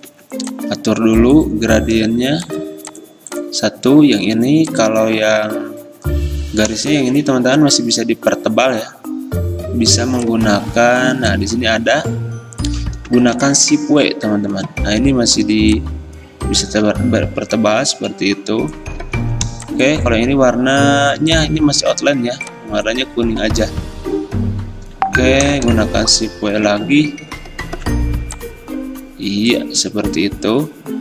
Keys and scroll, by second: 0.1 g, 13.5 w, 26.7 w.